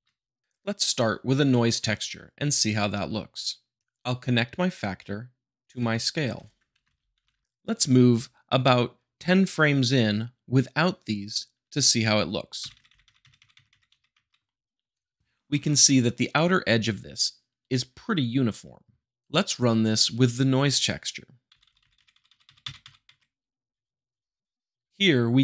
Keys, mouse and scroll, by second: 2.5-3.5 drag, 3.7 click, 6.8 Left, 7.3 Right, 12.6 Right, 13.8 Right, 21.5 Right, 22.6 Right, 24.5 middle click.